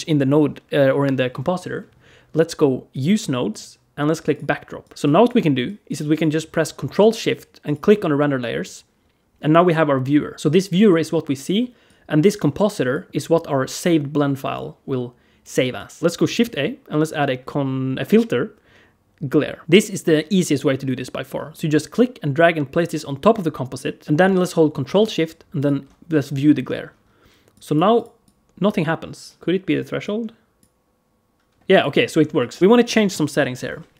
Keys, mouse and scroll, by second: 2.8 click, 3.3 click, 4.2 click, 4.6 click, 5.5 click, 5.9 click, 7.5 ctrl+shift+click, 8.5 click, 11.7 click, 15.6 click, 16.2 shift+a, 19.6 middle click, 21.4 click, 24.0 middle click, 25.4 ctrl+shift+click, 27.3 click, 27.8 click, 28.1 click, 29.4 middle click, 29.9 click, 31.6 click, 32.2 click.